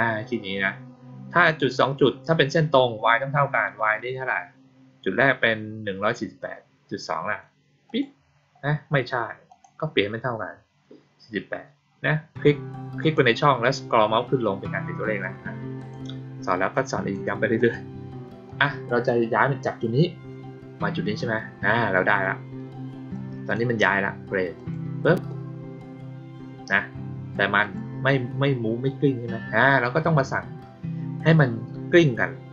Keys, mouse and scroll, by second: 7.8 click, 9.4 click, 9.9-12.9 middle drag, 9.9-11.7 scroll down 2, 11.7-12.9 scroll up 2, 12.9 click, 15.7 click, 16.7-17.0 drag, 17.5 click, 18.4 click, 23.0-23.4 drag, 24.5 click, 27.5 click.